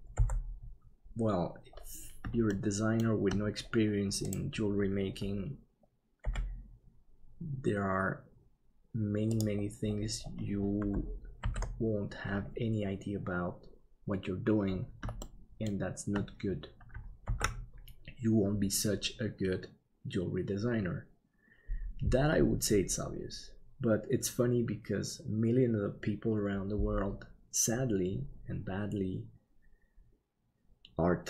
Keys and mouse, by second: 0.1 n, 2.5 shift+middle click, 6.2 g, 11.4 alt+a, 15.2 shift+middle click, 17.4 ctrl+s.